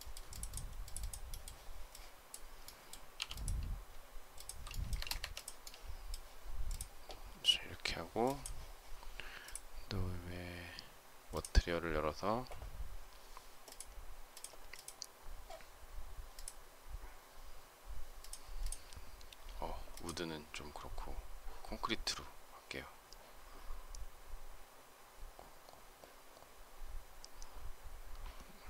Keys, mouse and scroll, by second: 3.0 m, 4.2 shift+click, 4.7 space, 4.8 Escape.